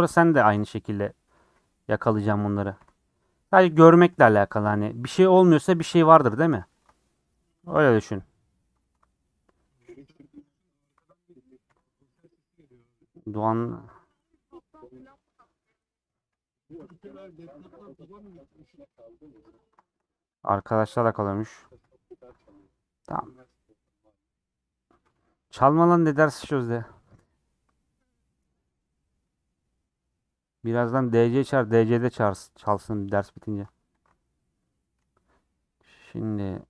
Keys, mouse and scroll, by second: 0.3 shift+middle click, 0.6-1.4 scroll up 7, 0.9-5.3 middle drag, 1.4 3, 2.7 ;, 4.1 KP_Decimal, 5.3 2, 6.4 3, 7.7 ;, 8.2 middle click, 8.8 3, 11.6 ;, 12.2-13.2 middle drag, 13.7 click, 15.2 click, 15.9 middle click, 17.8 ;, 18.1-19.3 middle drag, 19.3 3, 19.5 click, 20.0 middle click, 21.0 shift+click, 21.8 ;, 22.3-25.3 middle drag, 26.7 middle click, 27.7 scroll up 3, 28.1-31.6 middle drag, 31.6 scroll down 2, 32.0-33.4 middle drag, 34.0 alt+click, 34.5 scroll down 1, 34.6 middle click, 35.1-35.4 scroll down 8, 35.7-36.6 middle drag.